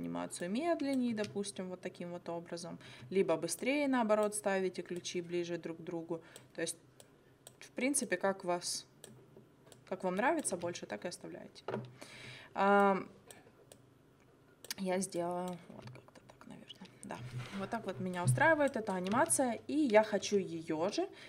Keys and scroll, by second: 1.1 space, 2.9 space, 10.6 space, 12.1 space, 15.8 space, 17.1 space, 19.1 space.